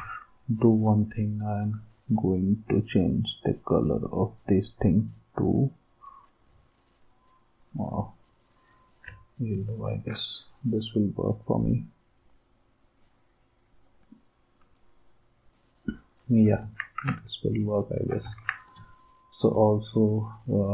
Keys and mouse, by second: 16.6 ctrl+s, 18.3 ctrl+s.